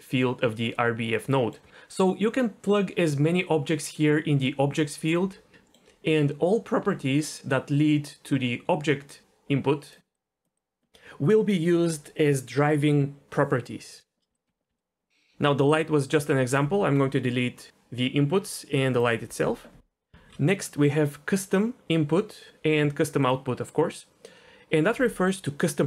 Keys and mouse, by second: 1.4 middle click, 5.6 middle click, 6.8 d, 7.2-9.9 drag, 9.9-10.5 d, 10.1 click, 10.5 click, 10.8 d, 10.8 d, 14.3 d, 14.4 right drag, 14.7 d, 15.9-16.6 drag, 18.2 Delete, 18.9 click, 19.2 Delete, 20.1 shift+a.